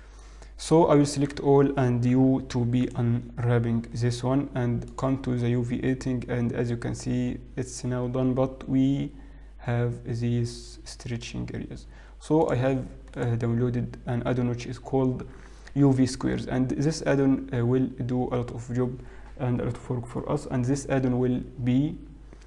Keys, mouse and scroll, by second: 0.6 middle click, 0.6-2.0 scroll down 1, 2.0 Tab, 2.0 a, 2.2 u, 6.4 click, 6.4-6.9 scroll up 2, 6.9-8.0 scroll up 1, 8.8 scroll down 2, 10.2-11.9 scroll up 1, 12.6 click.